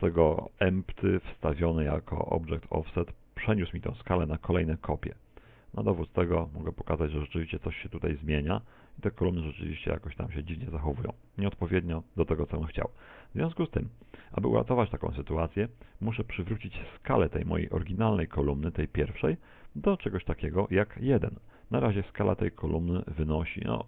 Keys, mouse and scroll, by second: 5.5 s, 11.9 middle click, 13.1 z, 13.5 middle click, 18.1 Tab, 21.4 Tab, 21.9 n.